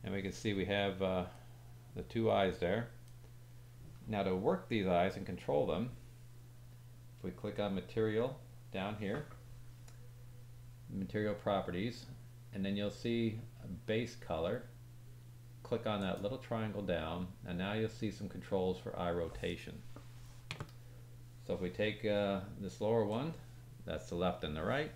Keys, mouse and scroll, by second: 1.4 middle click, 2.0-3.2 middle drag, 3.4-7.4 middle drag, 7.5 click, 12.6-13.2 scroll down 3, 15.9 click, 23.0-24.9 drag.